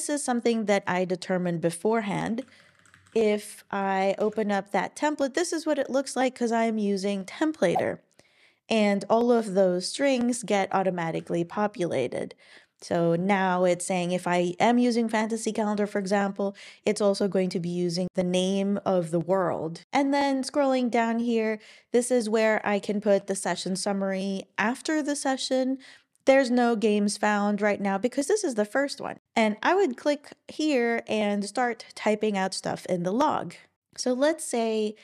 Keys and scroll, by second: 2.3-4.3 typing, 11.2 super+w, 23.5 Right, 23.7 Right.